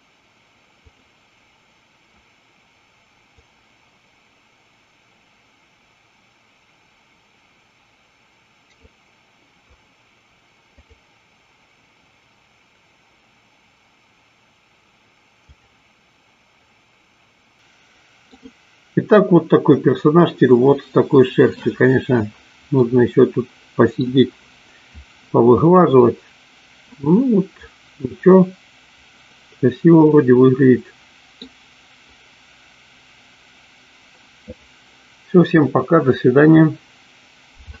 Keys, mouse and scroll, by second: 3.4-5.1 drag, 6.0-8.6 drag, 10.8-15.9 drag, 17.5 click, 17.6 middle click, 23.0-24.2 middle drag, 26.1-31.5 middle drag.